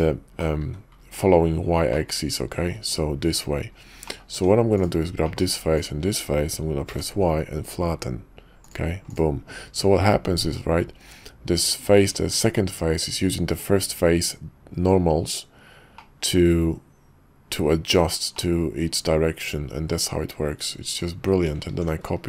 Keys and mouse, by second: 0.4 middle click, 0.8-2.7 drag, 3.6 click, 4.1 click, 4.3 Tab, 4.7 click, 5.2 click, 5.7 shift+click, 6.9 y, 10.5 middle click, 19.6-21.0 middle drag, 21.3 Tab, 21.7 alt+x.